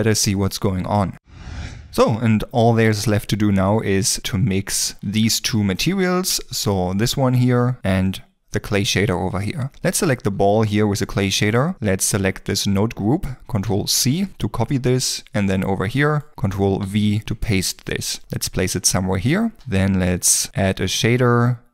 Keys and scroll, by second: 6.7 ctrl+s, 13.7 ctrl+c, 17.2 ctrl+v, 18.5 g, 20.0 shift+a.